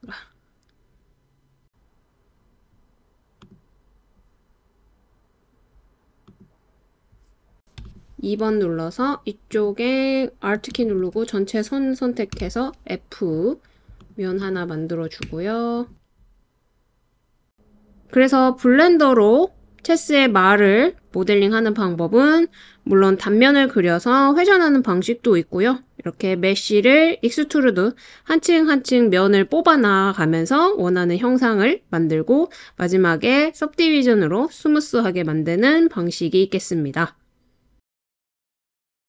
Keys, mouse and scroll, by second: 1.7 g, 1.7 z, 3.4 click, 7.9 click, 12.5 f, 14.0 click, 15.3 Tab, 15.7 click, 17.2 click, 17.7 Tab, 19.8 alt+click, 20.1 alt+click, 21.0 s, 22.6 click, 23.9 s, 24.6 click, 25.0 g, 25.1 z, 25.4 click, 25.9 click, 29.7 g, 29.9 z, 30.3 click, 31.1 alt+click, 31.7 g, 31.9 z, 32.6 click, 32.8 click, 33.9 click, 34.2 alt+click, 34.6 g, 34.7 z, 35.4 click, 36.4 alt+click, 36.7 s, 37.3 click, 37.6 Tab, 38.0 alt+z.